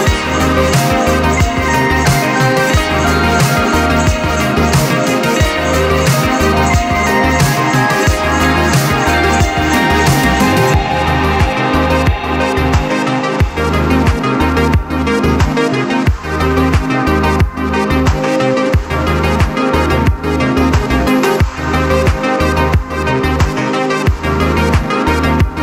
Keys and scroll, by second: 1.7 p, 2.7 7, 3.1 Return, 12.0 t, 19.8-22.4 typing, 22.6 Return.